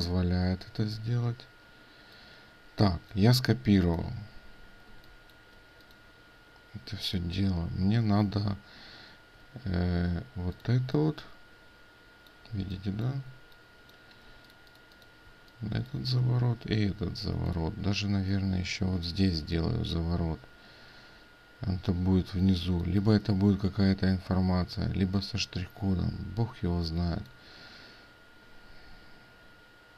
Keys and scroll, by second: 1.0 ctrl+v, 8.1 ctrl+space, 17.3 ctrl+space.